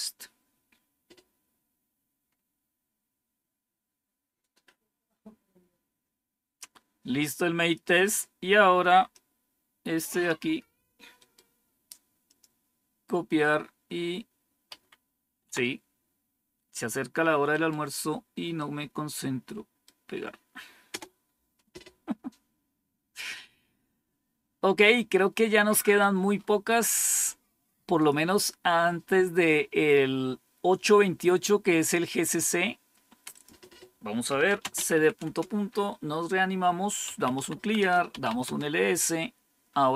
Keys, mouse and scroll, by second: 2.2-3.7 scroll up 2, 3.7 scroll down 1, 5.4 scroll down 1, 9.1-10.3 drag, 11.1 right click, 12.2 click, 15.4 Down, 17.4 right click, 18.5-19.8 right drag, 21.1 Return, 24.9 scroll down 1, 25.6 scroll down 1, 26.3 scroll up 1, 27.9 click, 33.3 click, 34.0-35.4 typing, 36.8-38.9 typing.